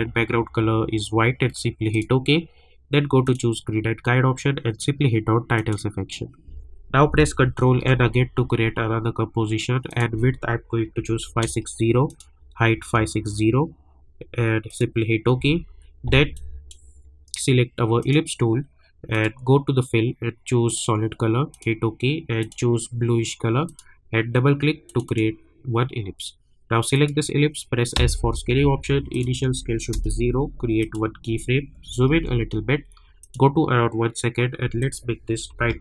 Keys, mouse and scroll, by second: 1.9 click, 5.5 click, 7.8 ctrl+n, 9.9 click, 12.1 click, 14.6-18.0 drag, 27.9 s, 29.1 click, 29.9 Return, 30.8 click, 31.8 =, 32.1 =, 33.2 click.